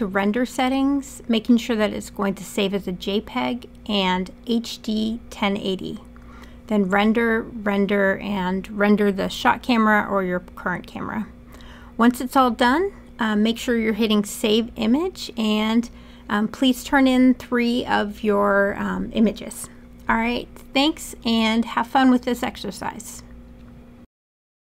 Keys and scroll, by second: 11.8-12.9 typing.